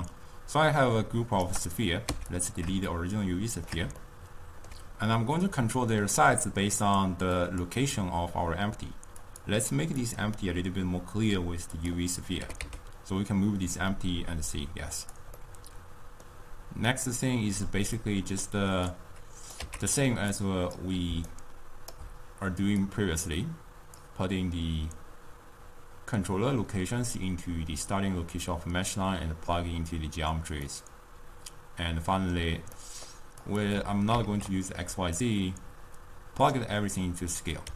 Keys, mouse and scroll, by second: 2.1 x, 3.2-7.2 shift+middle drag, 7.5 click, 9.4 click, 10.1-12.5 drag, 12.5 g, 15.5-19.1 middle drag, 19.1 click, 20.0 x, 20.7 click, 21.4-22.2 right drag, 22.2 d, 23.0-25.9 drag, 30.9-33.6 middle drag, 33.6 click, 34.2 ctrl+x, 35.3-37.7 drag.